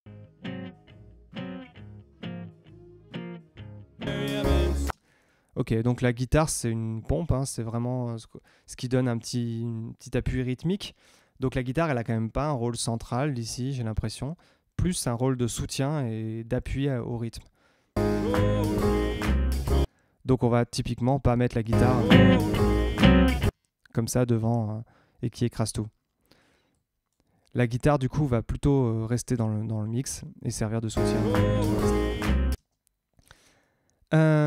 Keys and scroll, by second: 4.8 space, 5.0 Tab, 12.6 Tab, 15.3 Tab, 17.9 space, 19.8 space, 21.7 space, 23.4 space, 30.9 space, 32.5 space, 33.4 Tab.